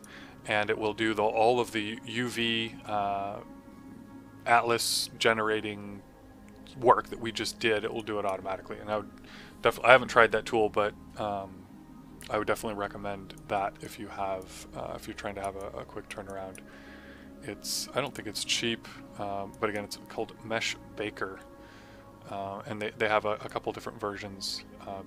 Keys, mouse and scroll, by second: 7.9 click, 13.3 click, 23.4 click.